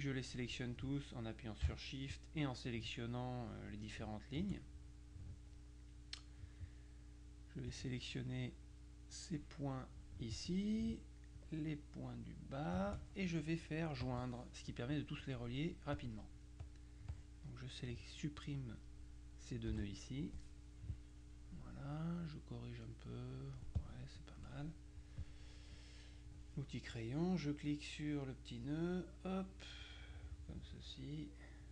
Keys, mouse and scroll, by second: 2.2 shift+click, 7.8-10.6 drag, 11.4-13.3 shift+drag, 14.1 click, 16.0 click, 16.7 click, 19.8 Delete, 22.3-24.9 drag, 24.1-24.9 scroll up 1, 25.1 click, 26.4 click, 28.5-31.7 drag.